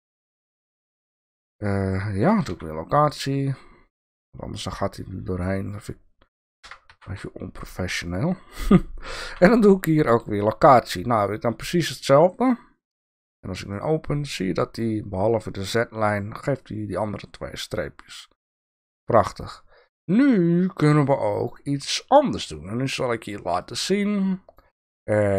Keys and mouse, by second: 2.5 i, 4.2-5.5 drag, 6.7 g, 9.2 i, 13.7 click, 18.1 click, 20.7 click, 23.6-24.6 drag.